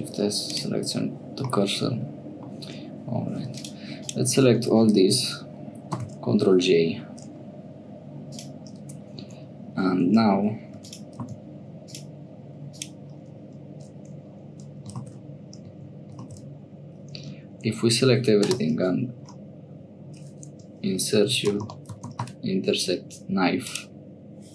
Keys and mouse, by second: 1.5 middle click, 6.1 ctrl+j, 8.3 click, 9.3 Tab, 9.9 2, 10.8 3, 10.8 click, 11.1 x, 12.7 click, 15.0 ctrl+z, 16.3 ctrl+z, 17.1 a, 18.4 space.